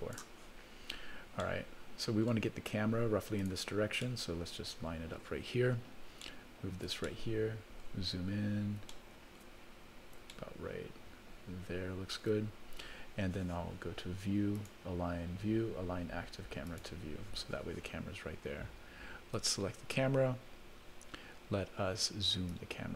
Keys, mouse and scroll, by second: 0.8-1.4 scroll down 2, 1.4 middle click, 3.4 click, 4.0-5.2 middle drag, 6.2 shift+middle click, 7.1 middle click, 8.0-8.5 scroll up 2, 8.9 shift+middle click, 9.6 scroll up 1, 10.3-12.3 shift+middle drag, 14.5-16.9 drag, 19.3 click, 22.5-22.9 drag.